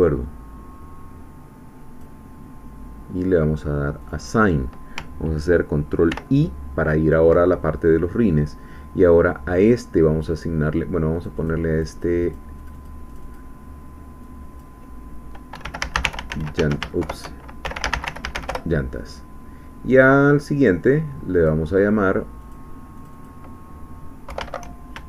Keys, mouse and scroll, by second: 4.0 click, 6.1 ctrl+i, 11.1-12.2 drag, 12.6 click, 14.2-15.5 drag, 15.5-16.3 typing, 16.6 Caps_Lock, 17.0 shift+Home, 17.6-18.4 typing, 18.5 shift+Return, 21.4 click, 22.4 click, 23.0-24.3 drag, 24.3 Home.